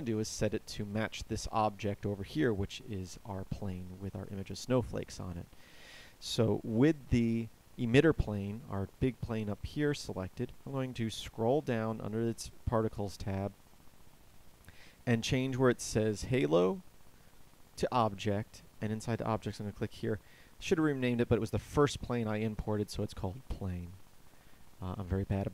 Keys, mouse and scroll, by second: 0.0 Escape.